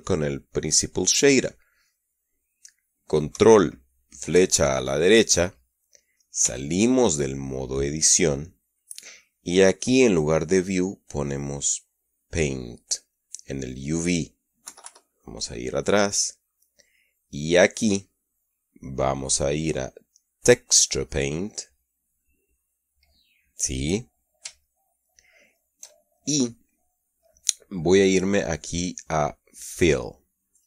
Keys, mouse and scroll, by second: 4.9 ctrl+Right, 7.0 Tab, 11.6 click, 13.6 click, 15.2 KP_Subtract, 16.0-17.0 middle drag, 19.6 click, 22.2 click, 25.2-26.4 shift+middle drag, 29.2 click.